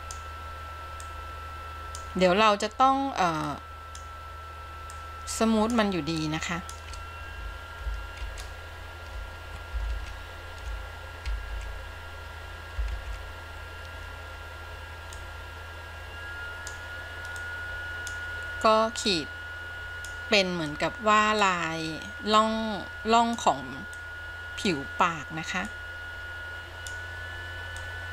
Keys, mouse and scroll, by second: 1.2-2.3 drag, 3.6 click, 5.1 click, 6.4 click, 9.2 ctrl+z, 10.9 ctrl+z, 12.3 ctrl+z, 13.9 ctrl+z, 15.3-17.0 drag, 17.7-18.3 drag, 19.2-20.2 drag, 20.9 click, 22.5-23.7 drag, 24.1-25.0 drag, 25.9-27.2 drag, 28.0 click.